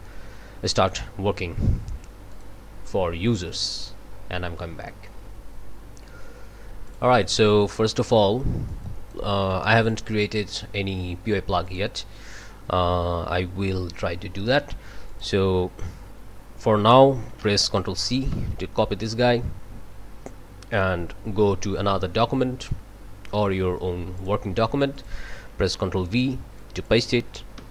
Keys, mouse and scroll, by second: 0.0-1.1 drag, 2.3 click, 3.5-5.2 scroll up 2, 5.2 click, 6.9 click, 7.7 click, 8.7 click, 9.5 click, 11.6 click, 12.3 click, 15.1 click, 18.3 ctrl+c, 20.7 click, 24.1 click, 24.9 click, 25.8 ctrl+v, 26.6 click, 27.6 1.